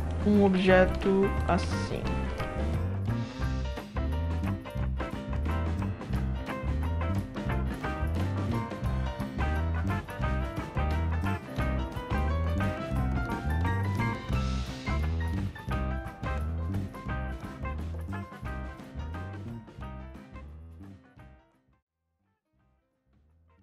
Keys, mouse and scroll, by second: 0.5-0.9 alt+drag, 1.4 click, 1.8 alt+middle click, 2.0 alt+middle drag, 2.4 middle click, 2.9 e, 3.3-3.6 drag, 3.8 ctrl+e, 4.1 click, 4.9 ctrl+e, 5.3 drag, 5.6 ctrl+z, 6.0 e, 6.5 drag, 6.9 ctrl+e, 7.1 drag, 7.5 alt+middle click, 8.2 e, 8.7-9.0 drag, 9.2 ctrl+e, 9.4-9.8 drag, 9.8 alt+click, 10.3 ctrl+e, 10.5-12.3 typing, 11.2-12.0 drag, 12.2 ctrl+e, 12.5 drag, 12.8 scroll down 1, 12.8 alt+drag, 13.1-13.4 alt+drag, 13.6 alt+middle click, 13.8 alt+middle click, 13.9 alt+middle click, 14.1 right click, 15.1 d, 15.2 right drag, 15.8 right drag, 16.1-16.4 right drag, 16.5 d, 16.6 click, 16.6 right click, 16.7 middle click, 16.8 alt+drag, 17.2 e, 17.6-18.2 drag, 18.4 w, 18.5-18.9 drag, 19.0 right drag, 19.2 alt+drag, 19.6 click, 19.9 alt+drag, 20.1 right drag, 20.3 click, 20.5-21.3 shift+right drag, 21.6 right drag, 21.9 alt+click, 22.0 click, 22.2 alt+click, 22.4 shift+click, 22.6 r, 22.8 click, 22.9 w, 23.2-23.6 drag.